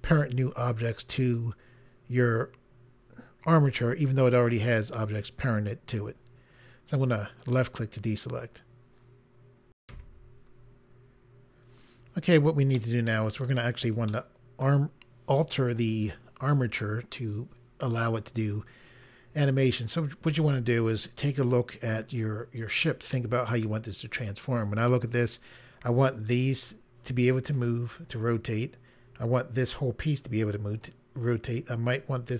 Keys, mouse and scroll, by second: 7.4 click, 11.1 Pause, 12.7 middle click, 14.0 middle click, 21.6-22.8 scroll down 1.